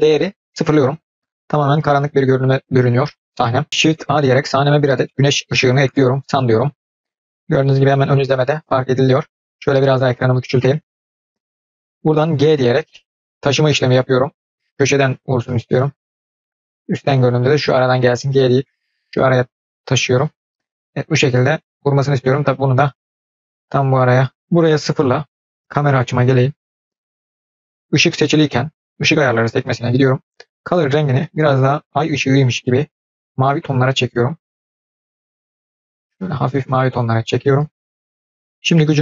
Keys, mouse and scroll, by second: 4.0 shift+a, 8.9-9.6 scroll down 2, 10.2-12.5 scroll down 3, 21.7-24.4 drag, 25.5 KP_0, 28.9 click, 30.3 click, 38.9-39.0 drag.